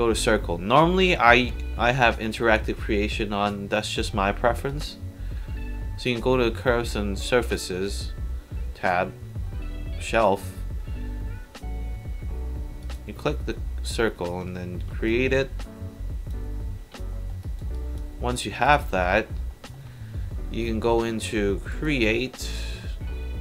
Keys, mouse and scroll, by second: 4.7 click, 12.8 click, 15.1-16.3 drag, 17.1 alt+middle drag, 17.4 alt+right drag, 17.8 alt+drag, 18.2 alt+middle drag, 18.6 alt+right click, 19.5 alt+middle drag, 21.7 click.